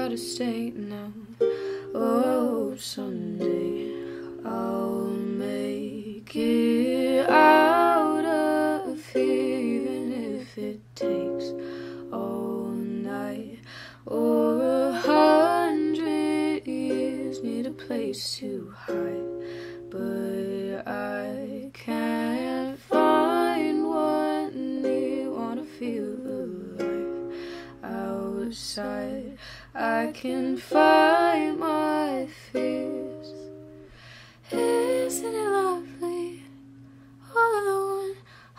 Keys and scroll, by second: 5.1 p, 7.2 s, 8.9 p, 19.6 F9, 29.9 F9.